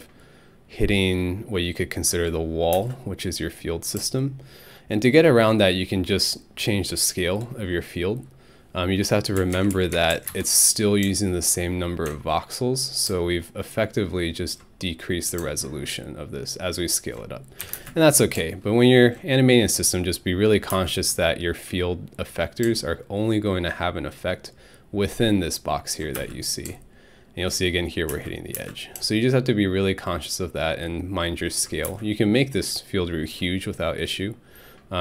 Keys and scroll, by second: 2.7 alt+space, 9.4 3, 9.5 Tab, 9.7 3, 9.9 Tab, 10.1 3, 10.3 Return, 17.6 alt+Home, 17.7 space, 20.7 space, 26.2 alt+space, 28.1 alt+space, 31.9 alt+space.